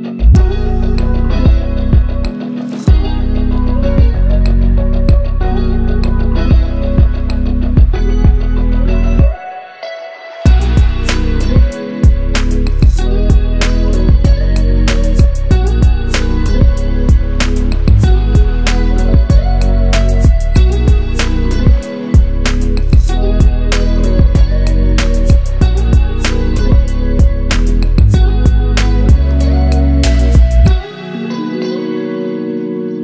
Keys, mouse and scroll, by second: 0.0 ctrl+Page_Down, 0.7 scroll down 1, 2.2 click, 5.2 click, 10.8 click, 12.3 ctrl+z, 12.9 click, 16.3 ctrl+z, 17.1 click, 19.5 ctrl+z, 22.4-25.9 drag, 26.9-27.3 shift+click, 27.9 Left, 31.1 ctrl+Page_Down.